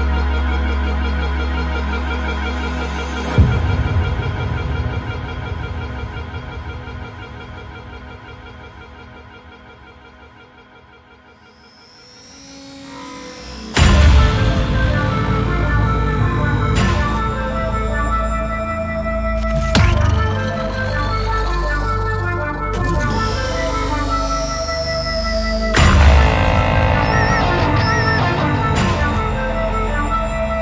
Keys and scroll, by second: 4.7 ctrl+g, 23.7 ctrl+g, 27.7-30.3 typing.